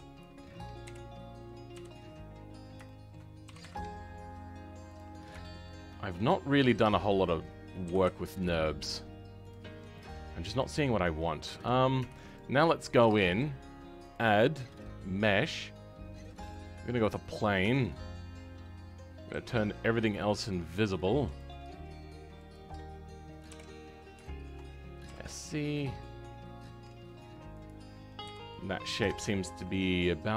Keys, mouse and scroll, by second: 0.1 click, 0.8 KP_1, 1.9-2.5 scroll up 8, 2.5 scroll down 2, 2.8 shift+middle click, 3.4 g, 5.1 scroll up 3, 5.3-6.8 shift+middle drag, 6.8 click, 7.0 middle click, 7.8 g, 9.6 scroll down 2, 9.9-11.9 middle drag, 11.9 Tab, 12.5-16.5 scroll down 2, 16.5 click, 16.7-17.1 scroll down 2, 17.1 middle click, 17.5 Tab, 17.8-18.7 scroll up 2, 18.7-20.1 scroll up 4, 20.1-23.4 drag, 23.4 KP_7, 23.8 scroll down 2, 24.1 shift+middle click, 25.0 s, 28.2 KP_3, 28.4 scroll up 2, 29.1 shift+middle click, 29.8-30.3 scroll up 1.